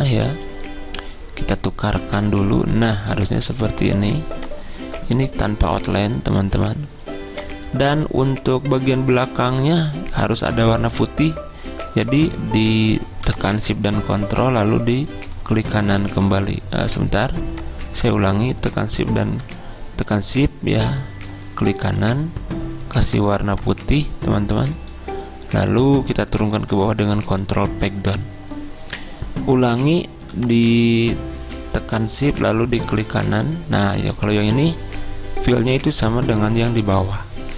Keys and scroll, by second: 26.8 ctrl+Page_Down, 27.0 ctrl+Page_Down.